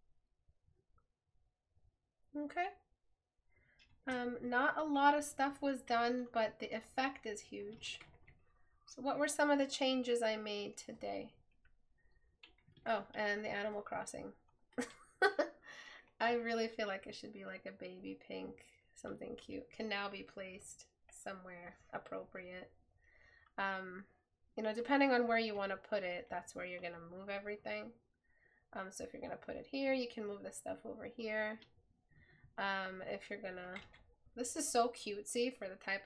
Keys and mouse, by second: 4.2 right click, 9.8 right click.